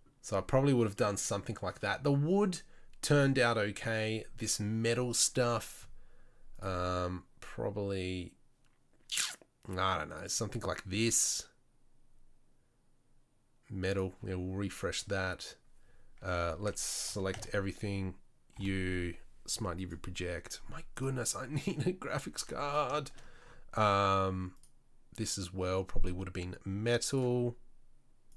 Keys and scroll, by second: 17.3 Tab, 17.7 a, 18.8 u, 22.6 Tab.